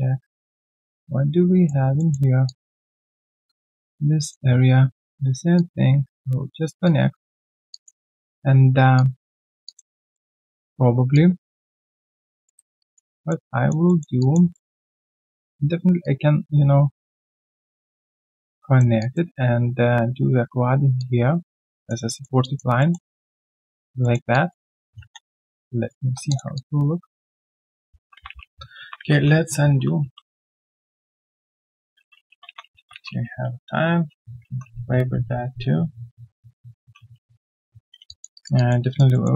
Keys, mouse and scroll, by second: 1.9 alt+middle click, 2.1-2.4 alt+scroll down 1, 2.4 alt+click, 7.7 alt+click, 8.1 alt+right click, 9.6 alt+click, 10.0 alt+middle click, 12.4 alt+middle click, 12.8 alt+click, 13.1 alt+middle click, 13.5 alt+click, 13.8 alt+middle click, 14.2 alt+click, 14.5 alt+middle click, 14.8 alt+click, 19.0 alt+click, 20.9 alt+click, 22.0 alt+middle click, 22.4 alt+click, 22.8 alt+middle click, 23.1 alt+click, 24.0 alt+middle click, 24.3 alt+click, 25.5 right click, 26.0-26.3 scroll down 1, 26.5 alt+click, 27.8-29.1 ctrl+z, 29.3 ctrl+z, 29.4 ctrl+z, 30.2 ctrl+z, 30.2 alt+click, 30.3 alt+scroll down 1, 30.4 alt+middle click, 30.5 alt+click, 30.6 alt+right click, 30.7 alt+click, 30.8 alt+middle click, 30.8 alt+click, 31.0 alt+right click, 31.1 alt+click, 31.1-37.3 typing, 38.0 alt+click, 38.3 alt+right click, 38.5 alt+click, 38.8 alt+right click, 39.1 alt+middle click.